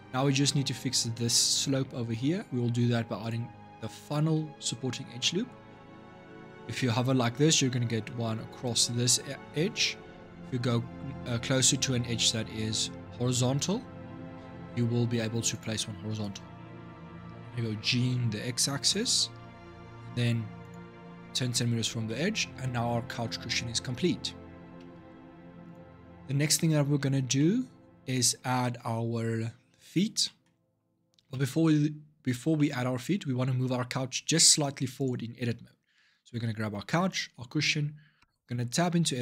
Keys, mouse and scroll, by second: 3.0 click, 4.8 ctrl+r, 17.5 g, 21.8-22.9 middle drag, 22.9 scroll down 2, 23.3-24.6 shift+middle drag, 24.6 Tab, 25.4 click, 27.2-34.7 middle drag, 34.7 click, 36.9 shift+click, 38.0 Tab.